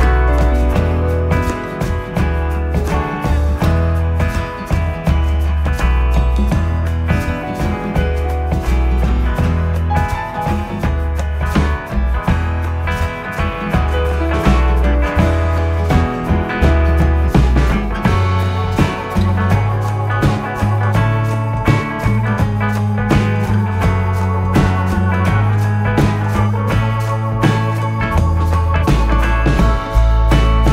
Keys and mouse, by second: 2.1 s, 4.8 click, 8.8 alt+click, 10.9 s, 12.4 click, 17.9 alt+click, 21.1 s, 24.8 click, 28.1 ctrl+r.